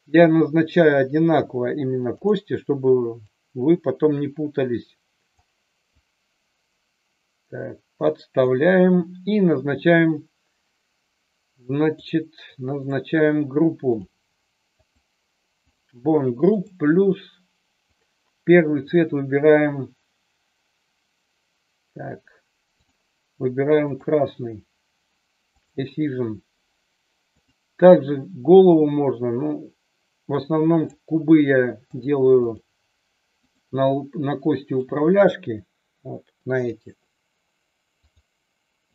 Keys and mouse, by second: 3.3-5.4 drag, 5.9-8.5 drag, 12.7 click, 13.8 click, 14.8 click, 15.7 click, 16.6 click, 18.0-19.0 drag, 22.9-24.0 drag, 27.4 click, 30.2-30.9 drag, 31.9 click, 33.4 click, 34.8-36.8 drag, 38.0 click.